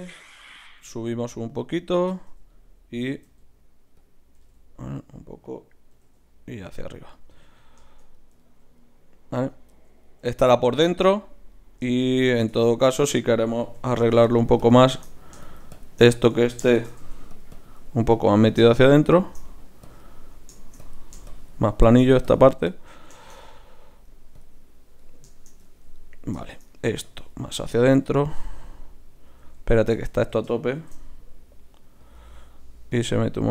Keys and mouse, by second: 0.2 KP_3, 0.8 g, 3.0 e, 4.4 g, 5.5-7.3 drag, 5.9 e, 9.4 Tab, 12.5 Tab, 13.8 f, 14.2-26.4 drag, 16.7 shift+c, 17.0 f, 20.1-22.6 right drag, 22.7-25.0 right drag, 27.0-29.5 drag, 29.5 ctrl+z, 29.9 ctrl+z, 30.7 shift+f, 32.9-33.5 drag.